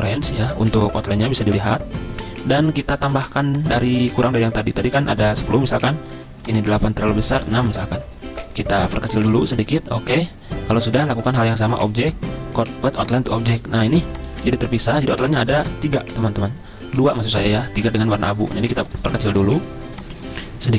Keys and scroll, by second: 1.1 ctrl+Home, 7.3 6, 7.4 Return, 15.1 ctrl+z.